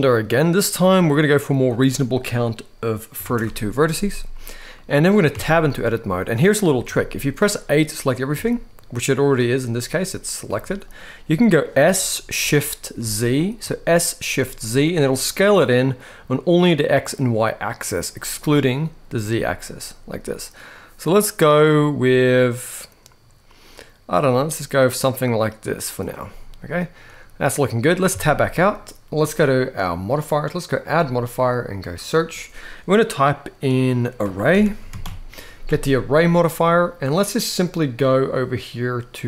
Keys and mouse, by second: 0.5 click, 1.3-3.1 drag, 4.6 middle click, 5.0 Tab, 6.1 middle click, 6.5 g, 8.0 a, 10.2 g, 11.1 middle click, 11.5-13.3 typing, 26.0-27.6 middle drag, 27.8 Tab, 29.6 click, 30.6-36.0 drag, 34.3 r.